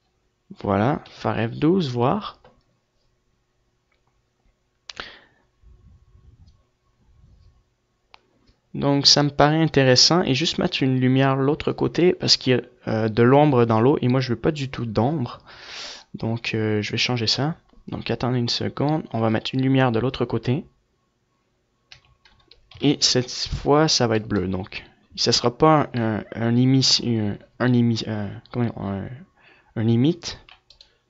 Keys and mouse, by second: 22.3 F11, 23.1 KP_3, 27.2-29.6 drag, 29.6 middle click, 30.7 shift+d.